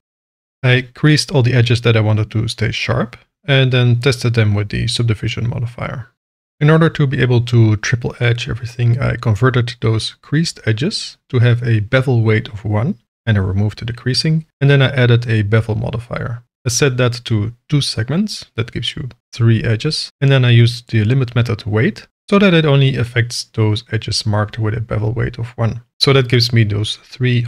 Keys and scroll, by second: 0.2 alt+a, 0.8 Tab, 7.2 n, 8.7 KP_1, 8.9 KP_Enter, 12.5 0, 12.8 ., 13.1 0, 13.5 2, 14.0 Return, 18.7 0, 19.0 Return.